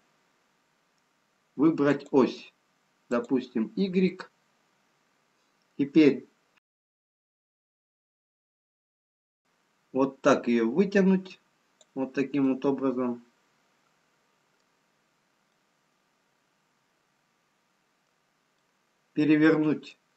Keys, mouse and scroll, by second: 2.1 click, 8.9 click, 16.2-17.6 scroll down 1.